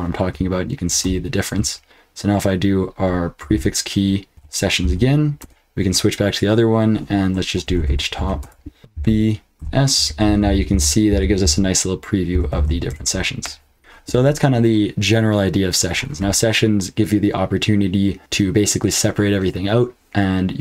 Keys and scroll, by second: 0.9 ctrl+x, 3.4 ctrl+b, 4.1-4.8 typing, 5.4 Return, 7.4-13.4 typing, 8.9 ctrl+b, 12.9 Return.